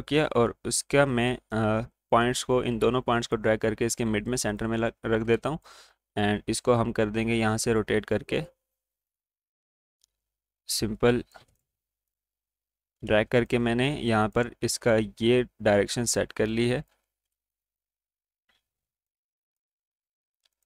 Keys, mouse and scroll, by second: 4.9 scroll down 1, 5.4 space, 5.5 click, 5.9-7.7 alt+scroll down 1, 7.7-11.6 drag, 12.9 scroll down 1, 13.6-17.2 drag, 17.2-17.6 alt+scroll up 1, 17.6 click, 17.7 space, 18.5 ctrl+z, 18.8-20.6 drag.